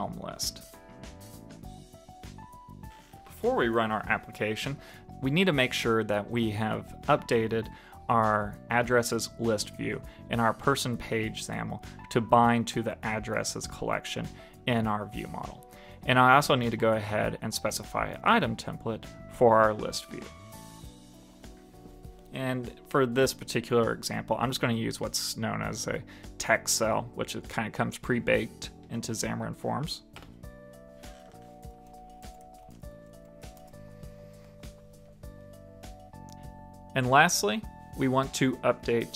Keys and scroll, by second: 0.2 super+s, 11.3 super+s, 35.3 super+s.